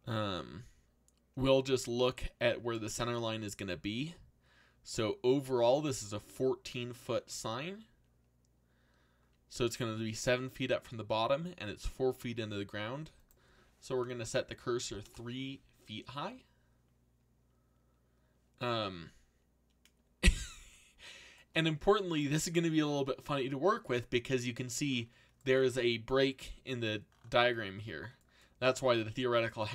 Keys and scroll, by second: 14.8 3, 15.0 Return.